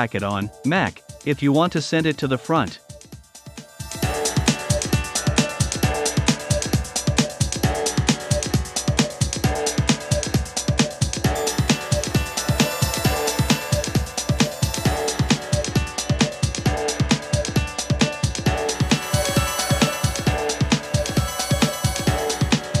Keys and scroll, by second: 8.9 a, 10.3 v.